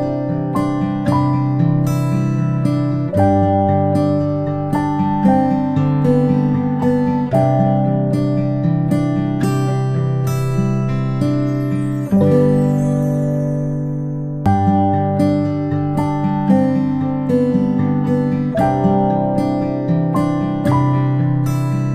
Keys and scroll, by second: 1.0 ctrl+v, 2.4 space, 2.6 space, 2.7 space, 5.0 a, 11.7 a.